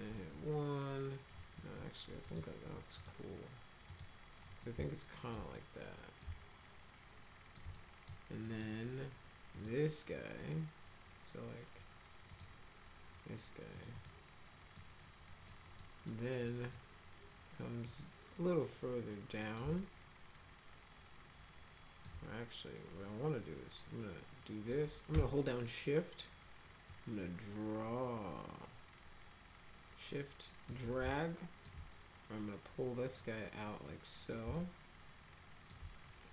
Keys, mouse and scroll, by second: 2.2 click, 2.9 click, 3.9 click, 4.6-5.3 alt+middle drag, 5.6 middle click, 6.2-7.5 alt+middle drag, 7.7 right click, 8.4 right click, 9.6 click, 12.3 click, 13.7 click, 13.9 click, 14.8 middle click, 15.3 middle click, 15.8 middle drag, 16.5 middle click, 17.8-19.5 drag, 19.8-22.1 alt+middle drag, 23.0-24.7 drag, 26.9-30.7 shift+drag, 31.0 alt+middle click, 33.2-34.3 drag, 34.5-35.7 alt+middle drag.